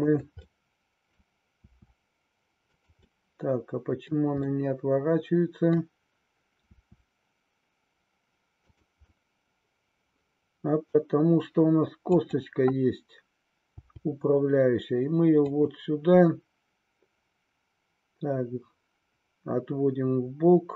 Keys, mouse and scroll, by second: 0.0 click, 0.6 middle click, 3.1-4.2 middle drag, 4.4-5.8 middle drag, 6.7 r, 8.7 click, 9.2-12.2 middle drag, 12.2-13.5 drag, 13.8 g, 15.4 click, 16.3-20.7 middle drag.